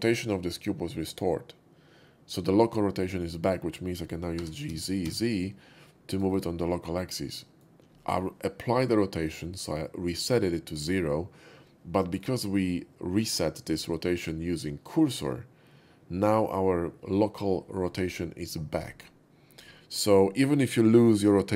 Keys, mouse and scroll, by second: 3.9 middle drag, 4.8 g, 4.8 z, 5.5 z, 6.2-6.6 right drag, 6.9-7.6 middle drag, 11.9-12.2 middle drag.